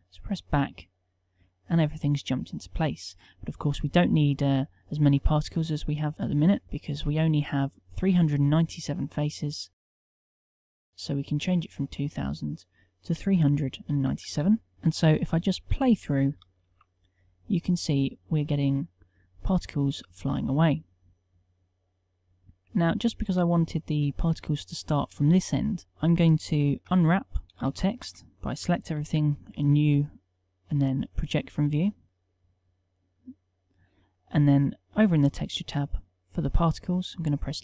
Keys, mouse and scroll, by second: 5.5 Tab, 14.7 Tab, 16.7 alt+a, 26.8 Tab, 26.8 KP_1, 27.5 a, 27.7 a, 28.1 a, 29.1 u, 32.0 Tab.